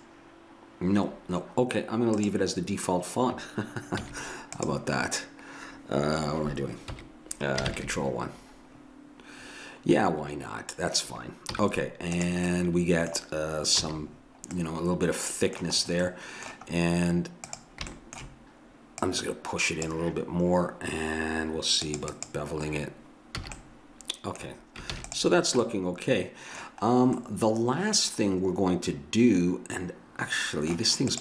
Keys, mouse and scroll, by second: 4.0 z, 6.9 KP_1, 7.7 ctrl+KP_1, 11.5 z, 13.8 a, 17.5-24.0 drag, 17.5-19.8 right drag, 23.5 a, 24.9 ctrl+s, 31.1-31.2 drag.